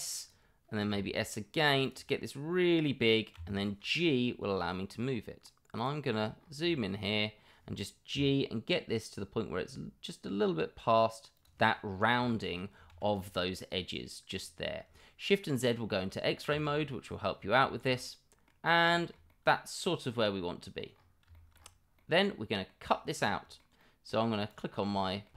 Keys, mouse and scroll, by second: 6.7 middle drag, 12.2 middle drag, 17.6 middle drag, 17.9-18.4 middle drag, 18.9 middle drag, 19.3-20.7 middle drag, 21.3 middle click, 21.9-22.6 middle drag, 23.2-23.6 middle drag, 23.8 middle click, 24.3 click, 24.7 middle drag, 25.1-25.3 middle drag.